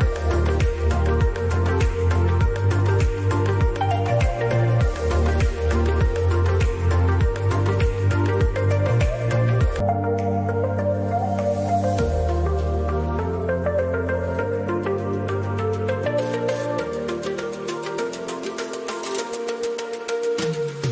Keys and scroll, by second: 2.4 ctrl+a, 2.6 ctrl+BackSpace, 3.4-4.9 typing.